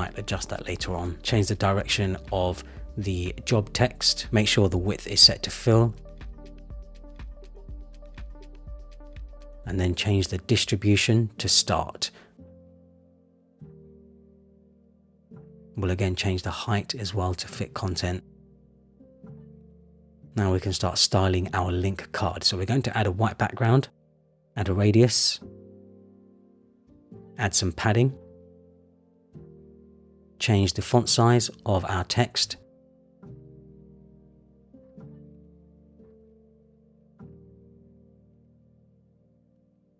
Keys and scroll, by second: 6.2 Return, 26.0 Return, 29.1 Return, 33.2 Up, 35.4 Up, 36.5 Up, 37.7 Up, 39.0 Down.